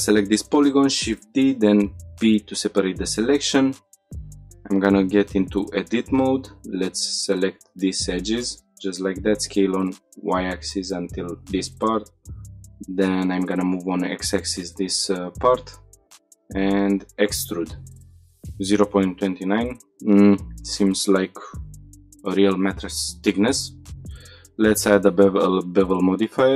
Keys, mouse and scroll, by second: 0.2 shift+d, 0.9 right click, 1.3 p, 2.2 Tab, 2.5 click, 4.1 Tab, 5.1 click, 6.1 2, 7.3 click, 8.1 shift+click, 8.8 s, 9.3 y, 10.6 click, 12.0 g, 12.3 x, 14.0 click, 15.3 3, 15.5 click, 16.6 e, 18.1 click, 19.5 Tab, 21.3-21.7 drag, 22.9-24.0 drag, 25.7-26.5 drag.